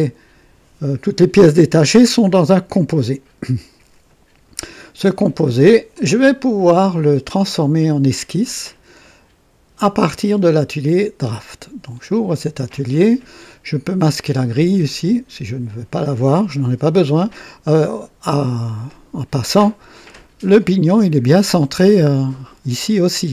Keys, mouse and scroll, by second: 3.4 click, 5.9 click, 7.7-11.8 drag, 14.8 click, 18.8 click.